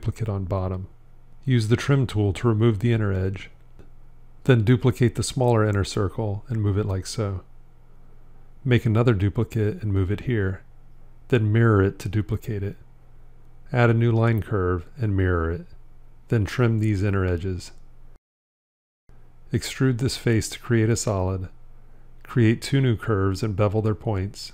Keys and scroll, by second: 5.3 shift+d, 8.0 shift+d, 11.1 alt+x, 15.0 alt+x.